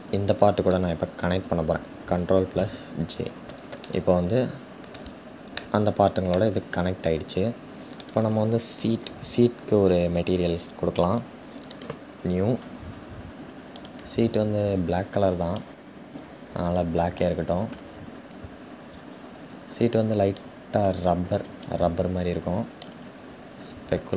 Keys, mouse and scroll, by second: 6.2-7.3 scroll down 3, 7.7 click, 11.4-15.1 drag, 18.5-19.0 scroll up 4, 20.0-24.1 drag.